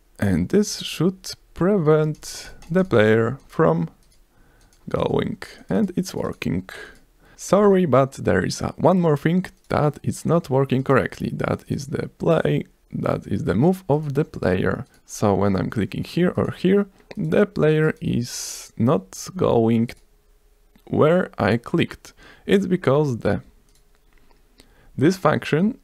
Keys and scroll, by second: 7.6 F5.